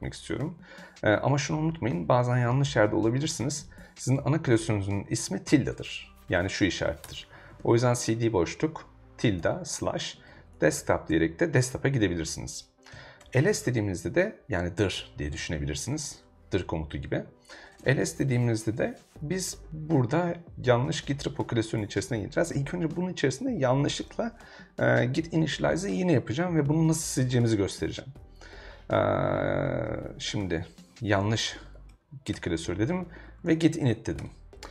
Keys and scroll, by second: 4.0 shift+`, 7.0-11.1 typing, 12.9 |, 13.2 Return, 15.4-16.4 typing, 17.8 l, 18.0 Return, 29.9-34.1 typing, 32.3 Return, 34.2 Return.